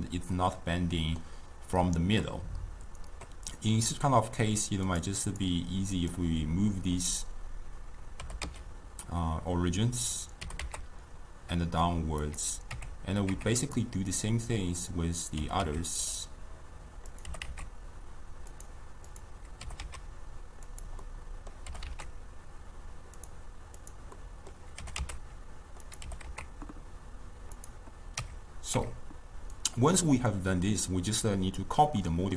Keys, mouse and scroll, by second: 4.9 click, 5.3 click, 6.1 click, 8.3 g, 10.5 g, 12.8 Tab, 13.4 Tab, 13.7 click, 17.4 g, 19.2 click, 21.2-21.8 middle drag, 21.8 g, 23.9 drag, 24.3-24.9 middle drag, 24.9 g, 28.2 Tab, 28.8 Tab, 29.6 click, 30.4 drag, 32.1-32.3 middle drag.